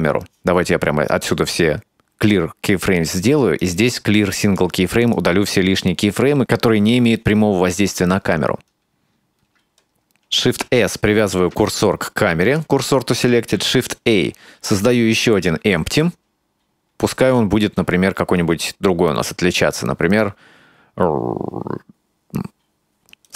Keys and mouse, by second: 1.2-3.0 right drag, 3.6-4.6 right drag, 5.0 ctrl+z, 5.0-6.4 right drag, 9.5-9.9 shift+middle drag, 10.7 shift+s, 11.7 shift+s, 13.6 shift+a.